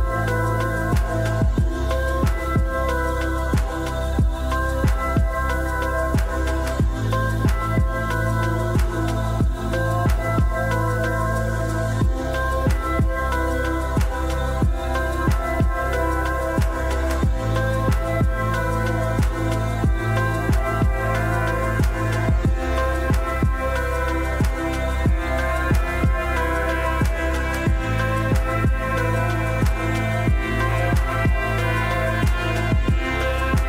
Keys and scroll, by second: 15.1 Delete, 28.7 r.